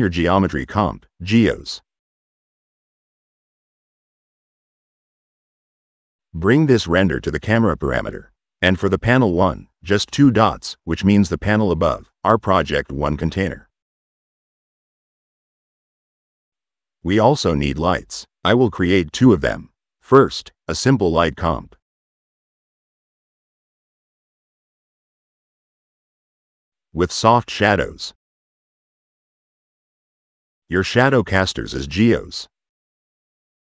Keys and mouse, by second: 0.4 click, 0.8 click, 3.8 click, 5.4 click, 5.9 click, 6.7-7.4 drag, 7.9 click, 12.3-14.8 drag, 15.9 click, 17.4 click, 18.3 click, 19.1 h, 19.5 t, 20.7 click, 24.1 click, 24.3 click, 24.7 middle click, 24.9-26.1 drag, 27.5 click, 27.9 click, 28.5 click, 30.6 click, 32.1 click, 32.8 click, 33.4 click.